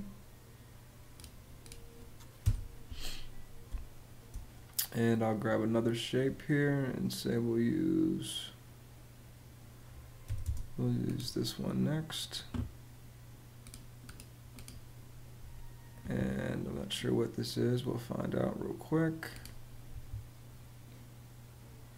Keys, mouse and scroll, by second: 2.1 BackSpace, 3.4 space, 10.0 m, 10.1 space.